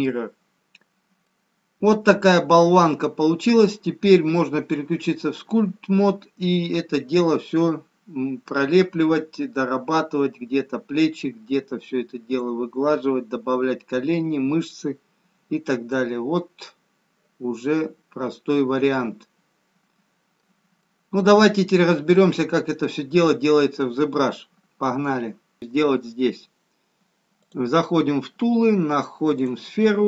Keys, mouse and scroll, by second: 3.9 click, 5.3 middle click, 19.7 middle click, 24.5 middle click.